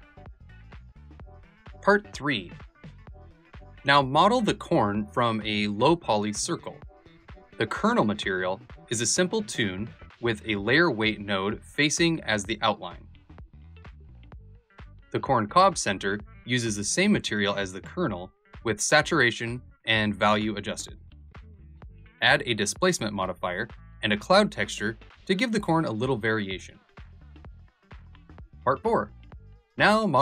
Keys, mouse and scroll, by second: 0.6 click, 1.0 shift+a, 2.1-4.2 drag, 5.9-7.8 drag, 11.4 shift+click, 20.6 click, 21.4 click, 23.0-27.1 shift+drag, 28.5 s.